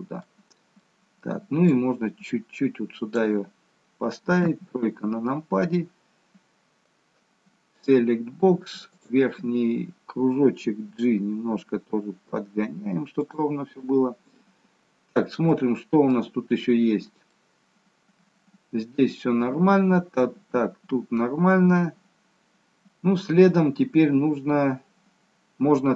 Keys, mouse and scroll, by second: 0.8 middle click, 1.7 click, 4.4 KP_3, 7.7 click, 8.9 click, 10.8 g, 13.8-14.3 scroll up 2, 15.3 shift+middle click, 15.3-16.9 scroll up 3, 17.2 middle click.